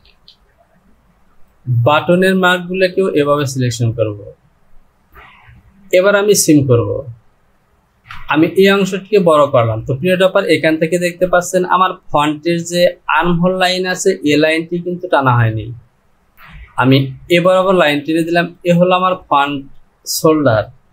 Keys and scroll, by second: 8.2 Return.